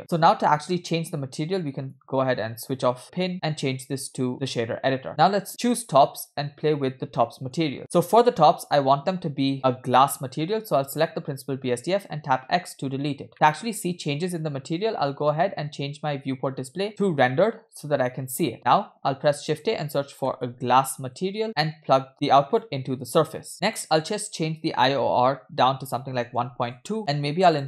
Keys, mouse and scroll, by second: 0.5-0.9 scroll down 2, 1.8 click, 3.3-4.6 drag, 5.6 click, 6.3-7.2 scroll down 4, 7.2 middle click, 7.7 scroll up 3, 7.8 middle click, 10.8 click, 13.3 x, 13.3 middle click, 13.4-15.3 scroll up 2, 17.2 click, 19.6 shift+a, 20.8 s, 22.1-22.9 drag, 23.1 click, 23.7-26.9 drag, 27.5-27.6 drag.